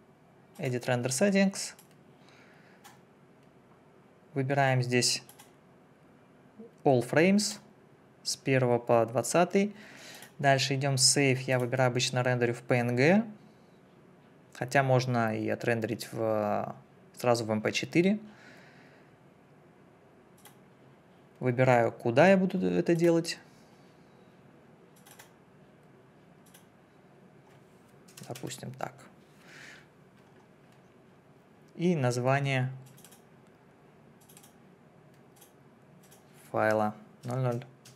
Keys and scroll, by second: 28.1 0, 28.3 2, 37.2 0.